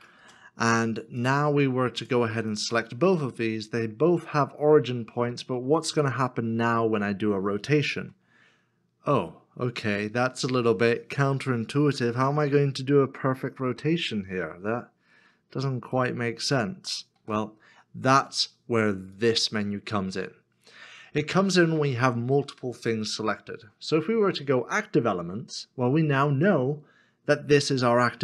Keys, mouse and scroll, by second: 0.2 Return, 2.5 Return, 2.5 shift+click, 17.2 ctrl+z.